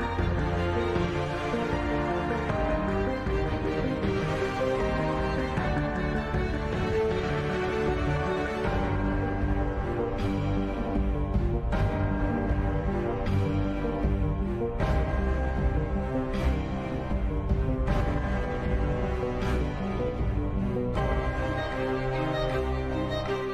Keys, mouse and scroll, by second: 1.0-2.2 right drag, 2.0 click, 2.7 ctrl+b, 4.0 click, 4.2 ctrl+b, 6.5 Tab, 6.9 Tab, 7.1 ctrl+z, 7.2 ctrl+z, 7.4 Tab, 7.6 ctrl+2, 8.2 Tab, 8.6 click, 9.1 right click, 9.1 n, 10.0-11.5 drag, 11.9 click, 12.3 n, 12.4 middle click, 12.6 Tab, 13.7 Tab, 14.0 z, 14.3 z, 14.6 i, 15.2 Tab, 16.4 t, 16.6-18.0 drag, 16.8 t, 19.2 Tab, 20.3 shift+s, 20.7 Tab, 20.8 shift+a, 22.2 r, 22.8 s.